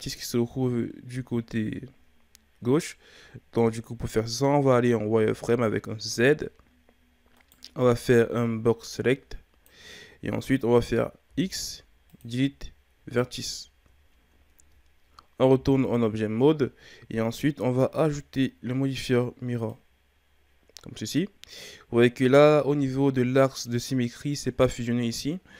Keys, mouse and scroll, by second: 5.2 z, 7.3 right click, 7.8 b, 11.2 x, 13.2-14.1 ctrl+scroll up 3, 14.1-14.5 shift+scroll down 1, 14.5 Tab, 15.5 z, 19.7-22.6 drag, 22.6-25.5 shift+scroll up 1.